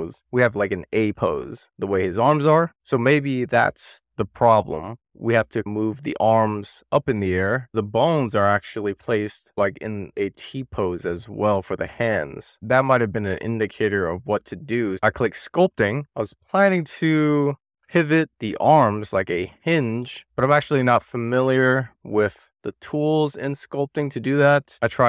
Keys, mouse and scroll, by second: 0.0-0.9 scroll up 1, 7.4 click, 7.9-9.6 middle drag, 10.4 w, 12.3-13.3 scroll up 1, 13.3-13.8 scroll down 1, 13.8-14.3 scroll up 1, 14.6-17.0 drag, 19.2-21.1 scroll down 2, 21.3-23.7 scroll down 2, 24.5 click, 24.7 middle click, 25.0 click.